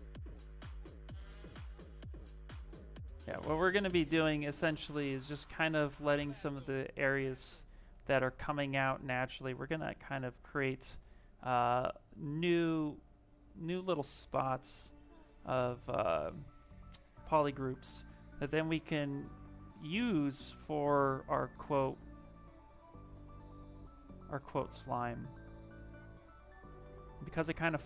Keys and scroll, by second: 16.8 s.